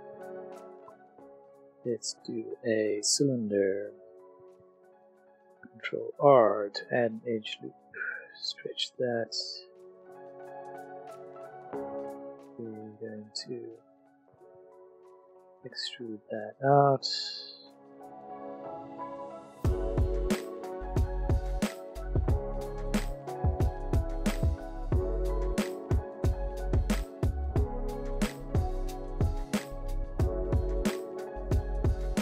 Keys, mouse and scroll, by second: 0.8 shift+click, 0.8 shift+a, 2.5 click, 3.6 middle click, 3.9 Tab, 4.9 shift+middle click, 5.3 ctrl+r, 6.5 click, 9.3 alt+click, 9.7 middle click, 11.3 click, 12.5 click, 13.2 middle click, 15.0 alt+e, 15.5 click, 15.7 s, 17.5 click, 18.0 s, 18.5 z, 19.0 click, 19.1 middle click, 19.1 middle click, 19.4 Tab, 19.7 a, 20.6 s, 20.8 x, 21.5 click, 21.8 a, 22.3 click, 22.9 click, 23.4 click, 23.5-25.0 typing, 23.8 click, 24.0 click, 24.1 click, 24.7 click, 25.3 middle click, 25.6 shift+click, 25.7 middle click, 26.0 middle click, 26.8 middle click, 27.5 click, 27.8 middle click, 27.9 click, 28.2-28.8 scroll, 28.8 ctrl+shift+r, 29.0 ctrl+z, 29.2 click, 29.5 middle click, 29.9 ctrl+r, 30.0 click, 30.5 click, 30.8 alt+click, 30.9 click, 31.0 alt+click, 31.3 alt+s, 31.3 middle click, 32.1 Tab, 32.1 click.